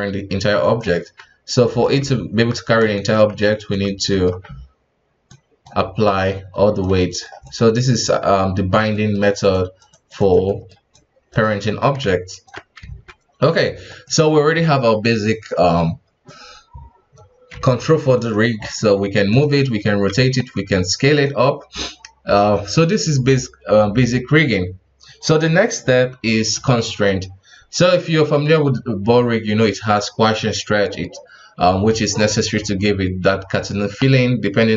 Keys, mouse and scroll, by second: 1.6 right click, 1.9 ctrl+Tab, 2.9 shift+right click, 3.3 ctrl+Tab, 4.1-5.3 middle drag, 5.3-7.0 drag, 7.0 middle click, 7.4-8.9 drag, 8.9 middle click, 9.2-9.5 scroll down 2, 9.5 click, 10.5 middle click, 10.9 click, 11.6 KP_1, 12.1 ctrl+Tab, 12.8 alt+a, 13.4 right click, 13.9 right click, 17.7 ctrl+Tab, 18.1 right click, 18.7 g, 19.5 r, 20.6 s.